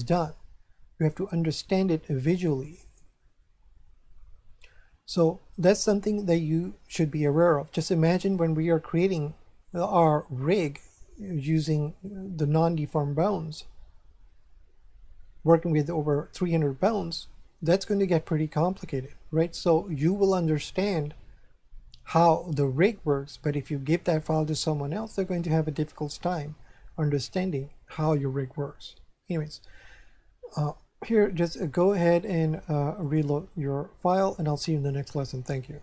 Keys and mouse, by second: 0.0 right click, 31.6 click, 33.0 click.